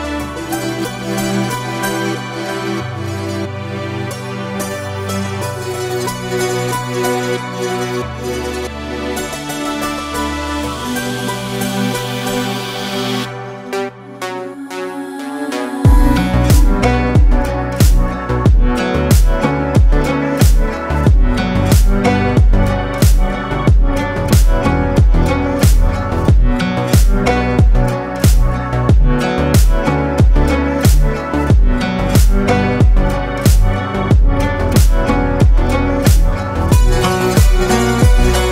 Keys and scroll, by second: 1.3 ctrl+g, 18.6 Delete, 30.0-31.5 typing, 36.2 ctrl+space.